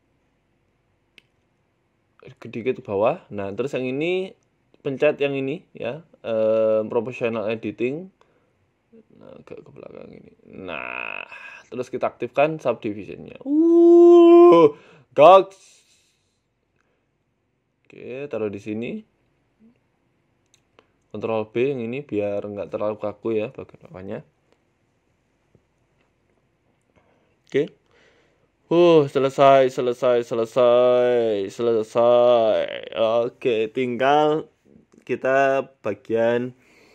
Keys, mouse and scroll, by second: 0.9 e, 1.5 ctrl+z, 2.1 r, 2.8-3.4 scroll up 5, 3.0 shift+middle click, 3.8 click, 5.9 click, 6.7 s, 7.0 g, 10.5 Tab, 10.7 scroll down 3, 10.7 scroll down 3, 11.4 scroll down 7, 12.0 scroll up 3, 13.3 click, 13.7 shift+middle click, 14.1 scroll down 4, 15.5 click, 16.0 s, 17.4 s, 18.0 g, 19.3 scroll up 5, 19.7 right click, 20.0 shift+middle click, 20.2 Tab, 20.5 shift+middle click, 21.1 ctrl+b, 21.8 Tab, 22.1-22.8 scroll down 4, 22.8 click, 24.2 s, 24.9 g, 25.6 shift+middle click, 25.9-26.3 scroll up 10, 26.3 shift+middle click, 26.6 s, 27.5 g, 28.2 s, 28.9 g, 30.9 middle click, 31.8 g, 32.9 shift+middle click, 33.7 a, 33.8 a, 34.0 middle click.